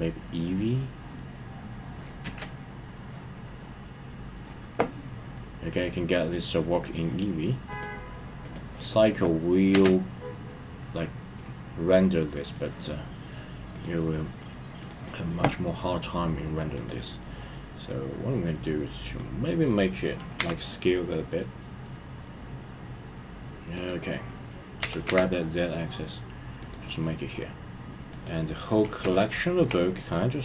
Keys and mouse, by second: 2.2 space, 7.7-8.5 middle drag, 9.7 space, 11.4-12.5 middle drag, 13.8-14.9 drag, 17.9-20.8 drag, 20.6 s, 23.7 click, 24.8 g, 25.0 z, 26.6 click, 28.1 click, 29.1-29.6 shift+middle drag, 30.2-30.4 drag.